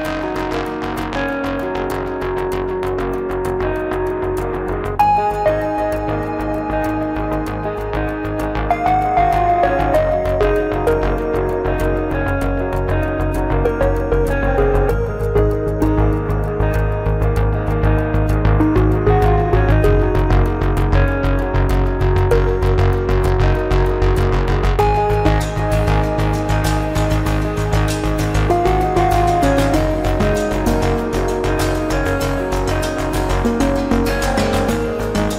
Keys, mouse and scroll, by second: 0.5-1.8 drag, 1.8-2.8 middle drag, 2.8 KP_1, 3.6-4.3 drag, 5.0 scroll up 2, 5.2-6.2 scroll down 2, 5.3 Tab, 6.2-6.8 middle drag, 6.8-7.3 scroll up 1, 7.3 KP_1, 7.8-9.5 scroll up 1, 9.5-11.5 drag, 11.5-11.9 scroll down 1, 11.9-12.8 middle drag, 12.8 scroll up 1, 13.0 Tab, 13.3 middle click, 13.9 Tab, 15.0-15.7 drag, 15.7-16.1 scroll down 1, 16.1 KP_1, 16.4 Tab, 17.0 a, 18.0 click, 18.6 click, 18.9-19.2 scroll up 1, 19.2 a, 19.5 3, 19.8 scroll down 2, 20.0-20.5 middle drag, 20.5-20.9 scroll up 1, 21.1 alt+s, 22.5 scroll down 2, 22.8 KP_1, 23.1 Tab, 23.9-24.4 middle drag, 24.4 scroll up 2, 24.5 Tab, 25.0 s, 26.0 Tab, 26.2 scroll down 3, 26.4-27.0 middle drag, 27.4 KP_1, 28.4 scroll up 1, 28.5-29.1 scroll down 1, 29.1-29.9 shift+middle drag, 29.9 scroll up 1, 30.1-31.5 scroll down 1, 34.2 scroll up 1, 34.4 scroll down 2, 35.0-35.3 shift+middle drag.